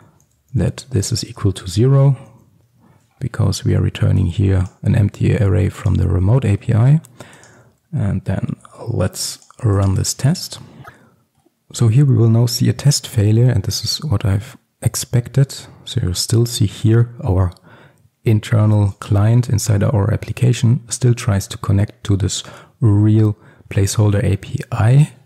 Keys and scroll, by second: 1.1 Return, 6.2 ctrl+x, 8.8 ctrl+s.